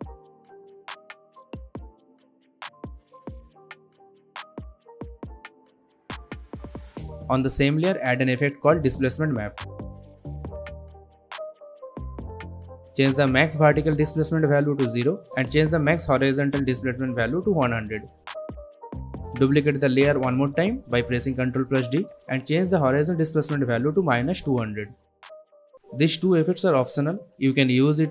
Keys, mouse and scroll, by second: 7.3 BackSpace, 7.6 click, 7.6 click, 9.7-11.3 typing, 12.0 click, 14.2 click, 15.8 Return, 16.2 click, 17.6 Return, 21.1 ctrl+d, 22.2 click, 24.0 Return, 25.0-26.9 drag.